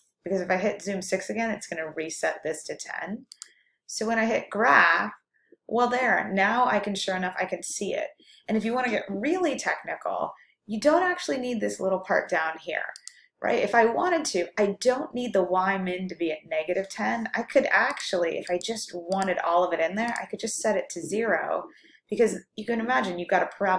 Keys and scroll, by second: 17.9 Down, 18.6 Down, 20.2 0.